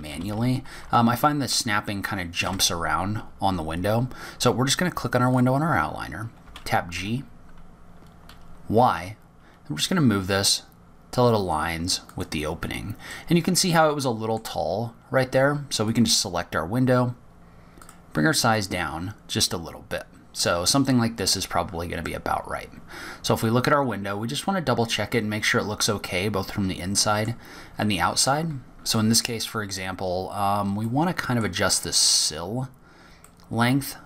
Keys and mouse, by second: 1.2 click, 3.8 click, 4.9 g, 11.2 g, 17.9-19.2 middle drag, 20.7 click, 22.6 click, 23.3 click, 25.2-25.8 drag, 26.8-30.1 middle drag, 30.1-30.5 drag, 30.5-30.8 middle drag, 30.8 click, 31.0 middle click, 31.1 click, 31.5 middle click.